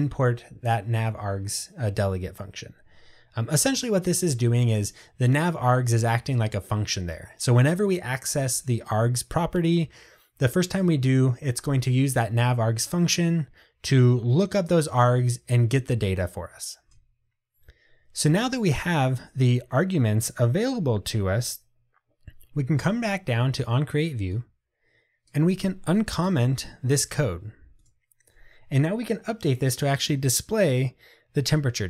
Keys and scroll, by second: 26.3 super+/.